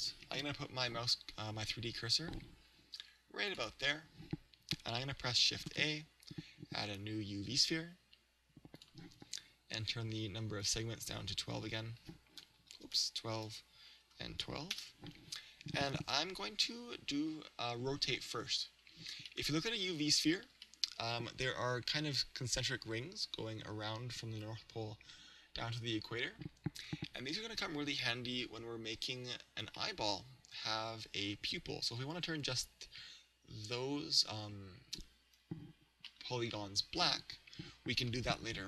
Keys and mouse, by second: 3.5 click, 5.7 shift+a, 10.6-13.4 drag, 19.4-22.5 middle drag, 28.0 KP_3, 29.9-31.8 middle drag, 36.2-38.0 middle drag.